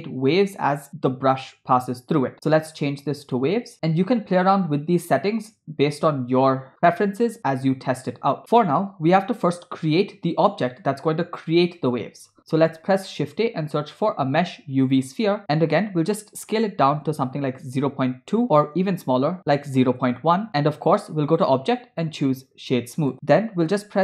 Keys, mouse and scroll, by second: 2.3-3.6 drag, 4.5 scroll down 4, 12.7 shift+a, 16.9 s, 21.3-23.1 drag, 23.7 g.